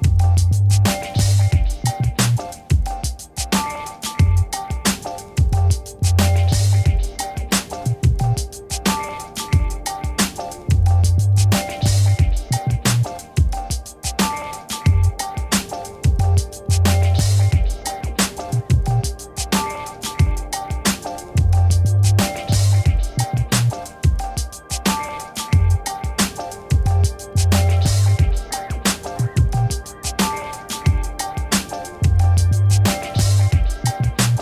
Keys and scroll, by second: 0.6 0, 1.0 2, 1.5 9, 3.5 d, 3.8 1, 12.2 ctrl++, 12.7 space, 17.8 v, 21.6 ctrl++, 27.5 m.